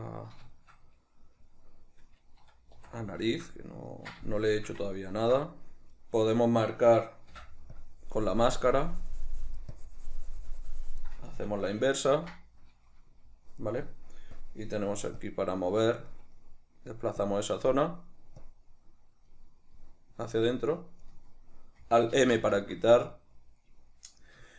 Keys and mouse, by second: 2.9 c, 7.5 middle click, 7.5 m, 7.9-15.4 drag, 12.3 ctrl+i, 16.5-17.3 middle drag, 17.3 click, 18.0-18.5 middle drag, 18.5 click, 19.9-20.6 middle drag, 20.6 click, 22.3 alt+m, 23.2-24.5 middle drag.